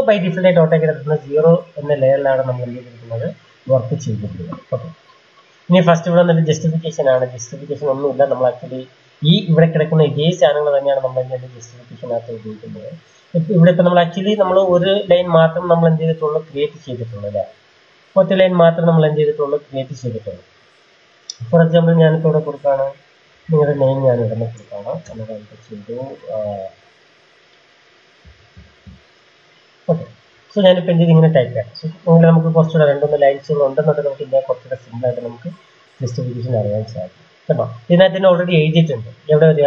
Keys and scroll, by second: 20.4 Return, 22.0-24.5 typing, 24.9 Return, 26.0 r, 28.1 o, 29.4 typing.